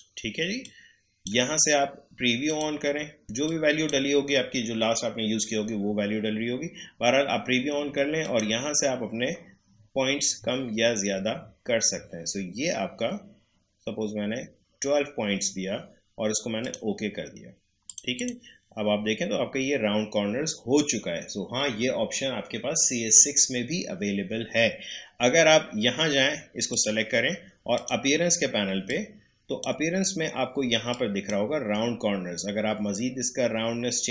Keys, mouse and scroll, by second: 6.4-8.2 scroll down 1, 8.2 click, 8.7-9.2 scroll down 1, 16.6 click, 26.6-34.1 drag.